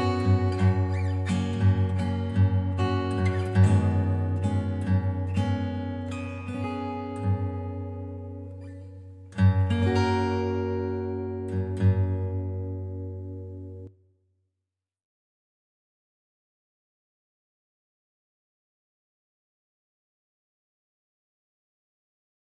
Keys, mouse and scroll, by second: 0.7 F3, 2.3-3.5 typing, 4.8 click, 5.5 click, 7.8 click, 9.4 click, 10.5 click, 12.5 click, 13.4 typing, 14.6 Return, 15.3-16.0 typing, 15.4 middle click, 15.5 middle click, 17.0 click, 17.7 click, 18.2 middle click, 18.5-19.2 typing, 21.0 scroll, 22.4 click.